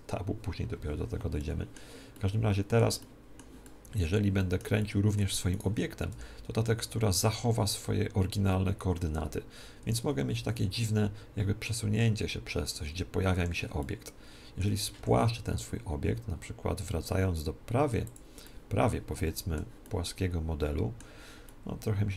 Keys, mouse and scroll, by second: 1.3-6.4 middle drag, 5.5-7.4 right drag, 6.0 r, 10.3 g, 13.7-15.6 middle drag, 14.9 s, 15.6 s, 18.0-19.8 drag, 18.4 middle click, 19.1-22.1 middle drag.